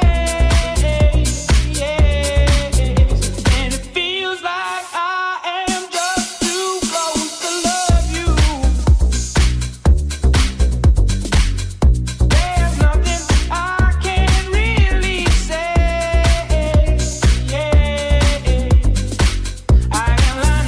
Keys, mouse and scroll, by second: 4.2-20.6 ctrl+drag, 9.2 Tab, 11.0 middle click, 11.0 right click.